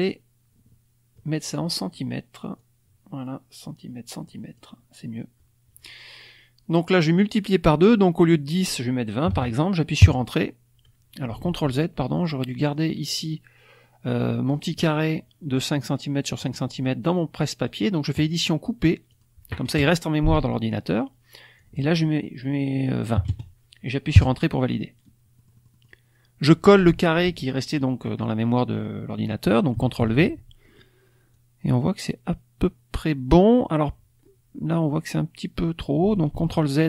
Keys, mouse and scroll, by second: 2.6-4.7 drag, 8.3 click, 9.2 KP_2, 9.3 KP_0, 10.0 KP_Enter, 11.4 ctrl+z, 12.1 click, 12.5 click, 18.1 click, 19.0 click, 21.5 click, 23.1 KP_2, 23.2 KP_0, 24.1 KP_Enter, 25.4 click, 29.9 ctrl+v, 30.6 middle click, 30.6 scroll up 1, 31.3-33.2 drag, 36.3 ctrl+z.